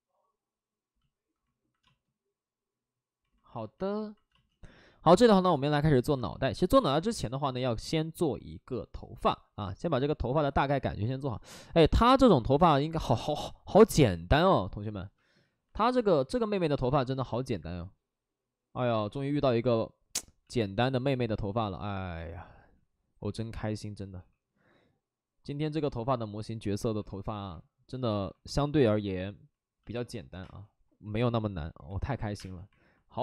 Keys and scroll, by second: 1.8 space, 4.2 space, 20.3 ctrl+z, 20.3 c, 22.5 ctrl+z, 24.1 w, 28.1 2, 30.4 space, 31.8 alt+s, 31.8 3, 32.2 3, 32.3 space.